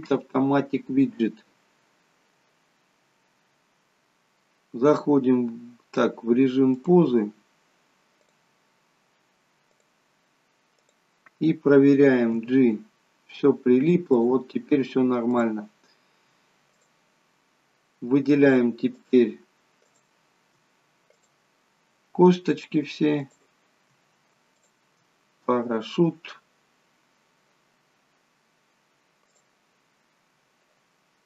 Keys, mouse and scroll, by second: 6.8 click, 8.2 click, 10.8 click, 12.2 g, 15.4 click, 19.0 shift+click, 19.8 shift+click, 21.2 click, 23.2 shift+click, 24.6 shift+click, 29.3 click.